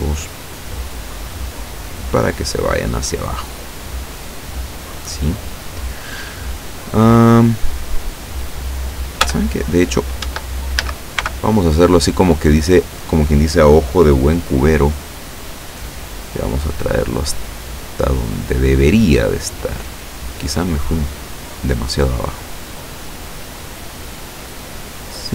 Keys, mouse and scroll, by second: 0.8-3.7 drag, 9.3 Tab, 10.3 Tab, 10.8 a, 11.2 b, 11.8 click, 15.1-16.5 drag, 17.0-18.5 drag, 19.3-20.5 drag, 20.8-22.1 drag, 22.5-23.5 drag, 24.1-25.3 drag.